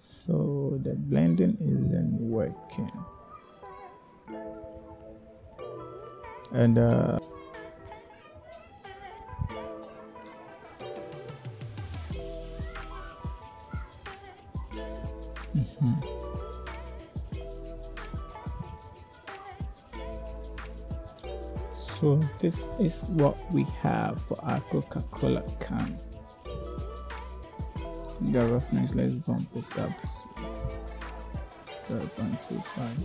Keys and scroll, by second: 28.1 0, 28.4 ., 28.8 2, 29.4 Return.